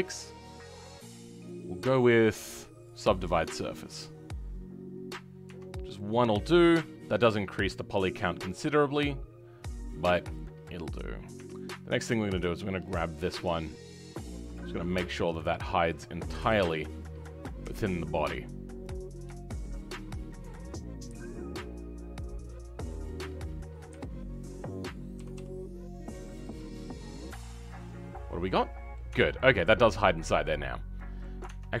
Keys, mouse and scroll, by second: 5.9-9.8 middle drag, 9.8-10.3 scroll down 2, 10.3 shift+middle click, 10.9 scroll up 2, 11.3 Tab, 11.6 middle click, 12.4-12.8 scroll up 3, 12.8-14.0 middle drag, 14.6-16.4 middle drag, 16.4 KP_3, 18.8 click, 19.3-21.1 shift+middle drag, 21.1 g, 24.2 scroll down 3, 25.2 g, 27.6 click, 27.8 scroll down 3, 28.1 middle click, 29.0 Tab, 29.3 middle click, 29.8 scroll down 5, 30.1-31.8 middle drag.